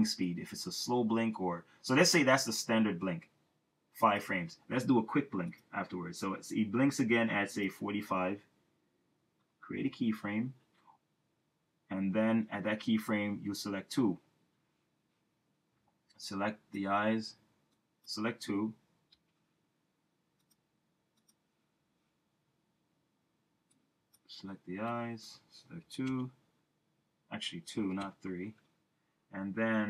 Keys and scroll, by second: 3.1 Return, 9.8 F6, 25.8 3, 26.1 Return.